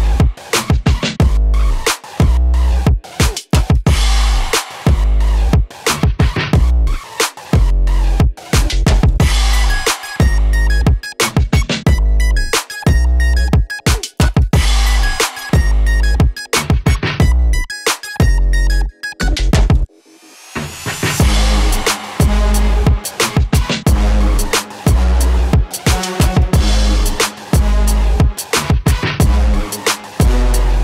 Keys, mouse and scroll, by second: 3.1 click, 6.2-10.3 drag, 10.3-12.6 drag, 15.1 click, 18.1 scroll up 1, 20.4-26.1 drag, 28.7-30.8 drag.